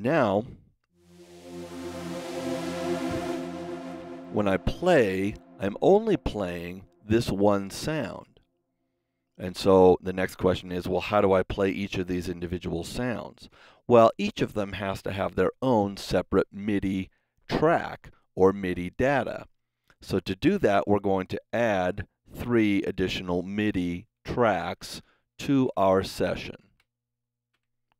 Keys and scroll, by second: 24.4 shift+super+n, 25.4 super+Right, 25.4 super+Down, 27.4 KP_3.